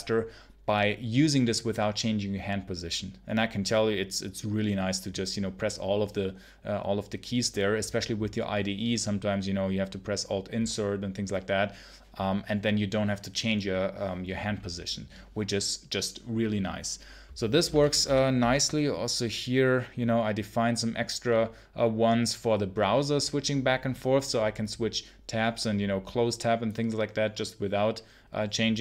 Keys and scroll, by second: 17.7 ctrl+super+l, 17.9 ctrl+super+l.